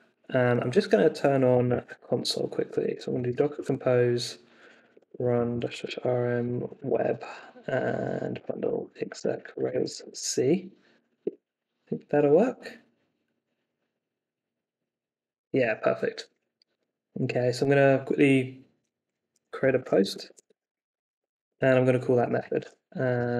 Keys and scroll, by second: 0.4 super+t, 1.2-10.6 typing, 11.2 Return, 19.3-23.3 typing.